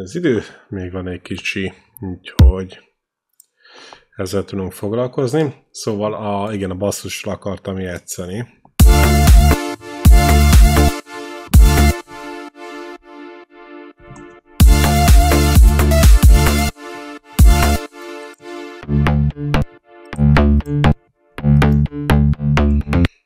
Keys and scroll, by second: 2.2 e, 8.6 space, 14.2 ctrl+Up, 14.4 space, 15.9 space, 22.8 space.